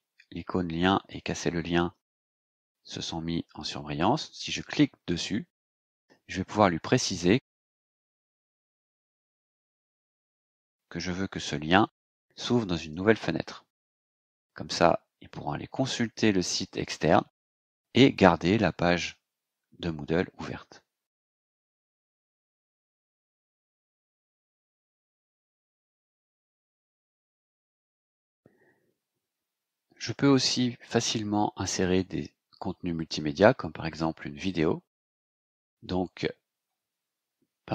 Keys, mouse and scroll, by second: 5.0 click, 12.7 click, 22.4 click, 23.5 click, 24.6 click, 24.8 scroll down 2, 27.4 Return, 28.3 click.